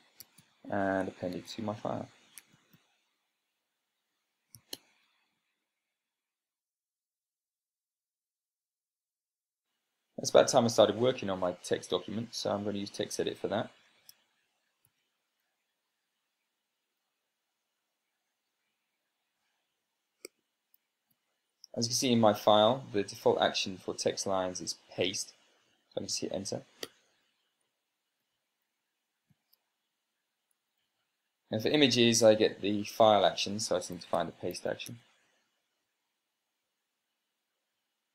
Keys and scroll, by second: 0.3 a, 0.9 p, 1.7 Tab, 2.6-3.7 typing, 5.2 Return, 14.8 super+space, 15.8 y, 16.6 t, 19.2 Return, 19.7 Return, 22.0 ctrl+p, 27.7 Return, 28.8 Return, 28.9 Return, 30.1 ctrl+p, 31.4 Down, 31.7 Down, 34.7-36.2 typing.